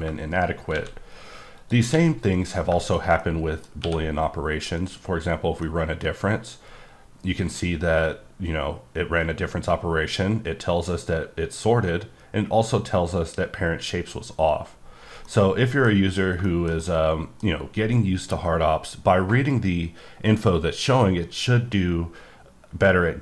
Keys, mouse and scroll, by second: 0.0 scroll up 1, 0.3 right click, 0.8 shift+a, 1.6 click, 1.9 s, 2.4 click, 3.2 middle click, 3.8 q, 4.7 click, 5.6 middle click, 6.1-8.1 scroll up 2, 15.2 middle click, 16.0-16.5 scroll down 2, 16.5 shift+middle click.